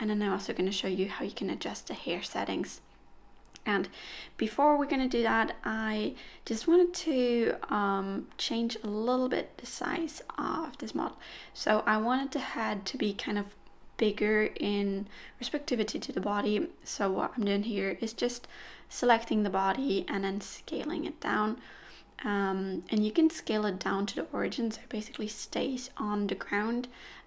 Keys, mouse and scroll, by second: 0.9-1.5 scroll up 2, 1.6 shift+click, 3.6 ctrl+click, 5.1 ctrl+click, 7.0 3, 7.6-8.2 scroll down 1, 8.2-8.9 scroll down 1, 8.9 middle click, 10.8 s, 12.8 KP_1, 14.0 click, 16.3 s, 20.9 click, 25.0 g, 25.3 ctrl+z, 26.3 click.